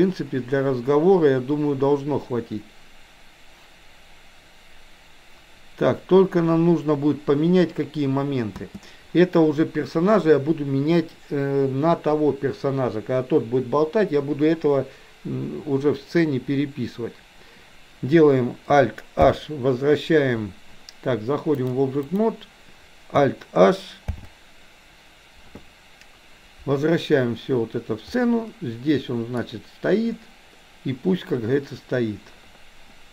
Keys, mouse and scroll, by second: 8.5 space, 19.2 alt+h, 21.6 click, 25.7 alt+h, 28.1-29.3 middle drag.